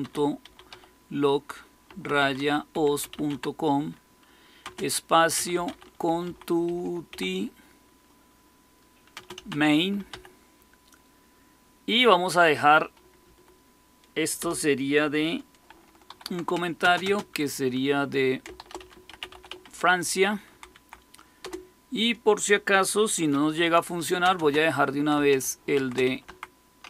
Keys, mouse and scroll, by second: 0.0-7.5 typing, 9.0-10.5 typing, 13.2 Up, 14.3 Return, 16.0-16.9 typing, 18.3-21.3 typing, 23.2-24.3 typing, 25.4-26.8 typing.